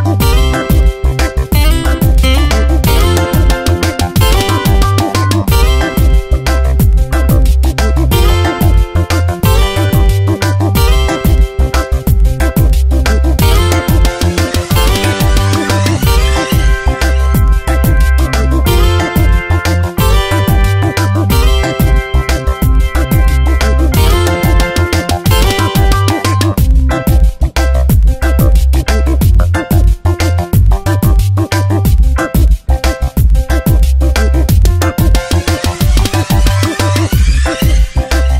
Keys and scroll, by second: 2.6 space, 7.7 space, 9.7 space, 11.9 space, 16.4 F9, 18.6 space, 21.8 space, 23.2 space, 24.7 space, 27.2 space, 28.5 ctrl+z, 30.6 space, 32.0 space.